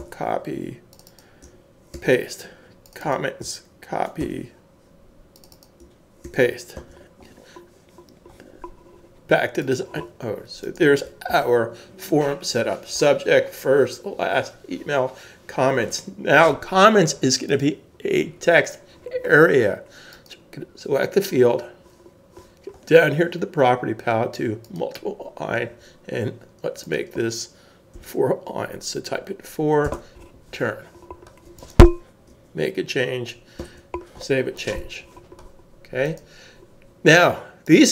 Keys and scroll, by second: 0.0 super+c, 1.9 super+v, 4.2 super+c, 6.2 super+v, 6.7 super+s, 11.3 super+s, 28.0 4, 29.8 Home, 33.6 super+s.